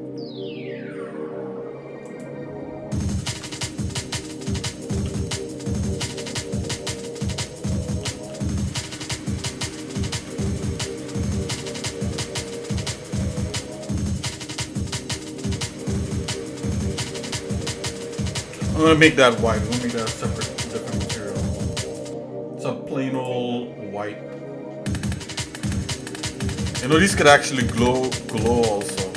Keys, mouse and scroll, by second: 0.1 f, 2.1 right click, 3.3 ctrl+z, 4.5 g, 8.1 s, 10.0 shift+middle click, 10.9 ctrl+KP_Add, 11.7 shift+middle click, 12.8 shift+middle click, 13.8 shift+middle click, 14.6 middle click, 16.0 shift+middle click, 17.3 shift+middle click, 21.0 click, 23.6 click, 25.1-26.3 shift+middle drag, 27.0 scroll down 1, 27.3 middle click, 27.9 shift+middle click, 28.9 middle click.